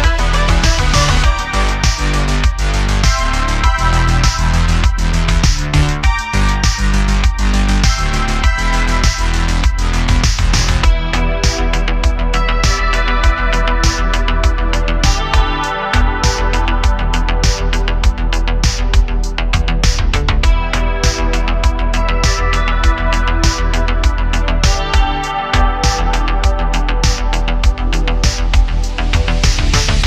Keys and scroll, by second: 2.3 Tab, 2.7 super+r, 4.0 3, 9.1 Tab, 9.8 shift+a, 10.9 s, 12.2 s, 12.3 z, 16.4 s, 19.5 Tab, 21.2 e, 23.5 s, 26.3 2, 28.4 super+b.